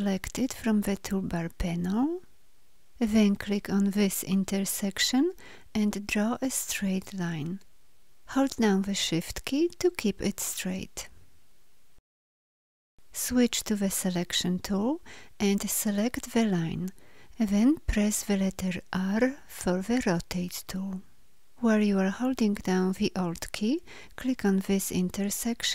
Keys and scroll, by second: 13.7 v, 18.8 r.